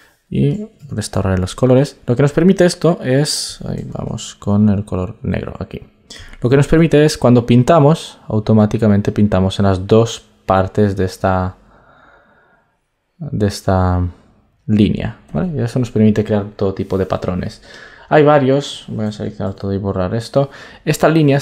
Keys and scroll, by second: 19.0 super+a.